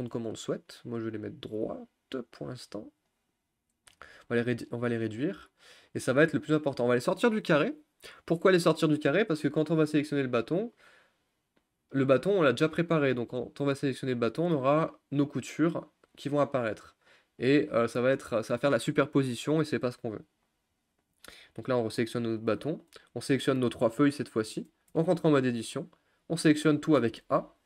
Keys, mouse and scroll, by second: 3.1-4.1 drag, 4.1 s, 6.3 g, 20.7 Tab, 21.2 click, 23.8 shift+click, 25.6 Tab, 26.9 a.